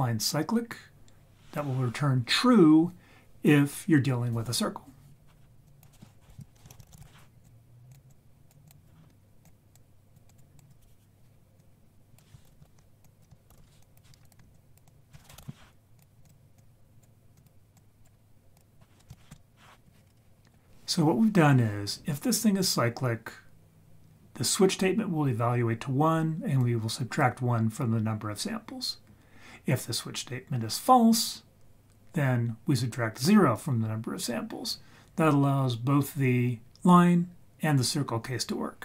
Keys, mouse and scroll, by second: 5.6 click, 6.7 shift+a, 6.9 s, 8.1 click, 8.6-9.4 drag, 9.7-10.1 drag, 10.3 click, 10.6 click, 11.6-12.2 drag, 12.4 ctrl+h, 12.6 ctrl+h, 13.0 click, 13.5 ctrl+h, 13.6 ctrl+h, 13.8 click, 14.2 ctrl+right click, 14.5 click, 14.9-16.2 drag, 16.6-17.0 drag, 17.4 click, 17.7 drag, 18.5 click, 26.6-27.2 drag.